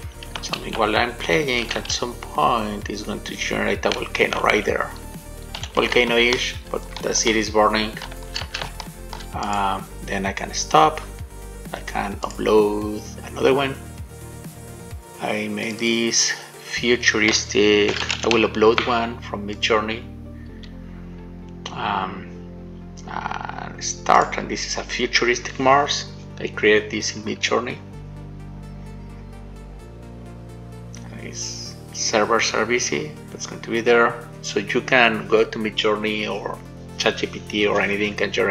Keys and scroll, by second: 0.9 shift+a, 2.2 shift+a, 4.4 w, 5.9 shift+d, 8.9 d.